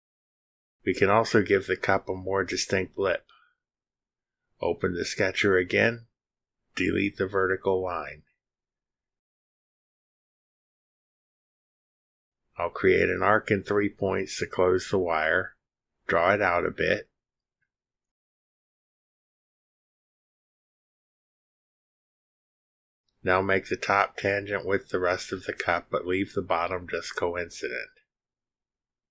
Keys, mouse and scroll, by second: 1.8-2.8 drag, 3.2-3.7 drag, 5.3 click, 6.2-6.5 scroll up 2, 6.8 click, 7.4-7.8 drag, 7.8-8.1 scroll up 2, 10.0 click, 11.0 Delete, 15.5 click, 17.3 click, 18.8 click, 20.4 click, 22.0 click, 22.8 click, 23.9 ctrl+click, 25.9 click.